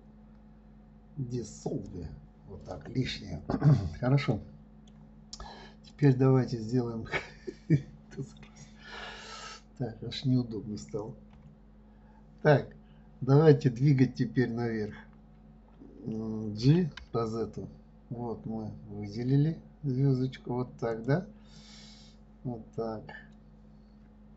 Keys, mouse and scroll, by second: 3.0 click, 4.7-6.3 middle drag, 6.3 click, 21.9-24.3 middle drag.